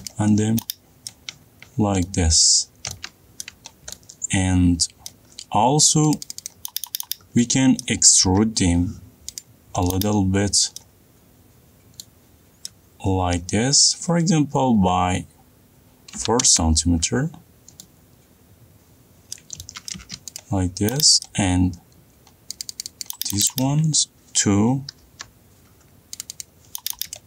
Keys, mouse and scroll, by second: 0.7 click, 1.0-1.7 scroll up 5, 1.7 middle click, 1.9-3.0 scroll up 10, 3.2-3.6 scroll up 4, 4.0 middle click, 4.4 middle click, 5.7 middle click, 5.9 middle click, 6.0 middle click, 6.0 middle click, 6.8 click, 6.9 click, 7.1 click, 8.4 middle click, 8.8 p, 10.0 click, 13.3 middle click, 16.8 4, 17.0 Return, 19.8-20.5 scroll, 19.9 middle click, 20.5 middle click, 21.0 click, 21.8 middle click, 22.1 middle click, 22.1 middle click, 22.9 middle click, 23.2 click, 23.4 click, 23.6 click, 24.0-24.8 middle click, 25.7 p, 26.8 click, 27.0 click.